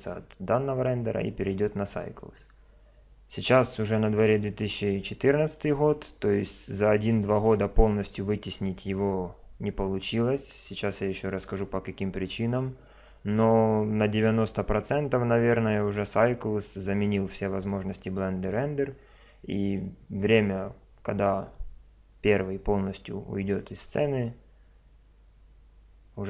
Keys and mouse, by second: 0.0 click, 16.0 click, 21.4 click.